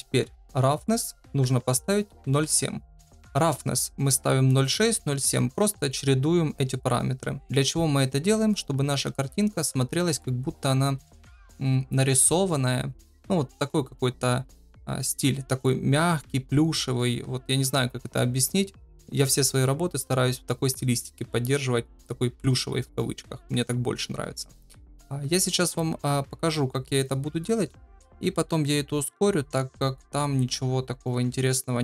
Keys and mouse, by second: 0.8-2.9 drag.